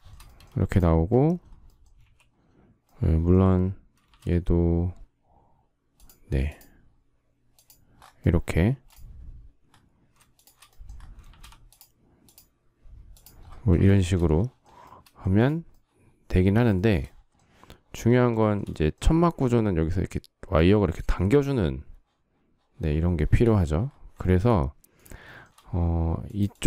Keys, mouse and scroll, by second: 0.4 space, 1.8 q, 4.0 shift+x, 8.5 space, 10.2 shift+click, 11.2 shift+x, 13.8 shift+middle click, 15.1 space, 16.6 shift+middle click, 18.2 shift+middle click, 23.0 shift+middle click, 24.1 shift+middle click, 25.1 shift+middle click.